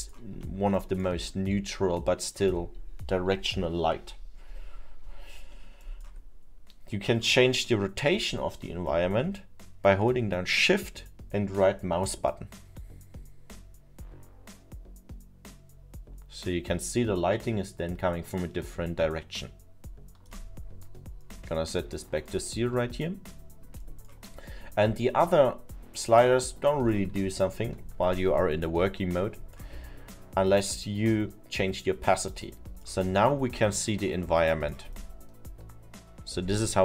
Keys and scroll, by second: 27.3 ctrl+z.